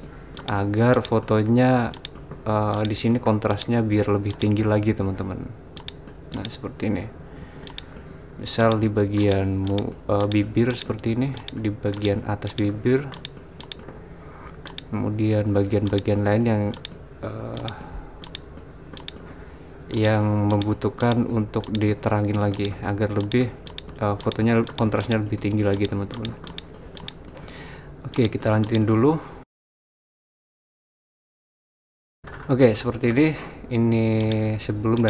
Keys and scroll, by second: 30.2 typing.